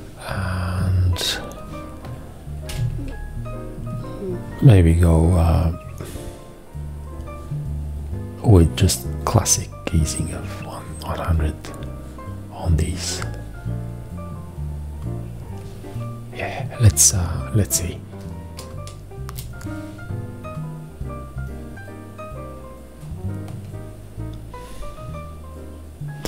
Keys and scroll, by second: 2.7 v, 19.3 Return.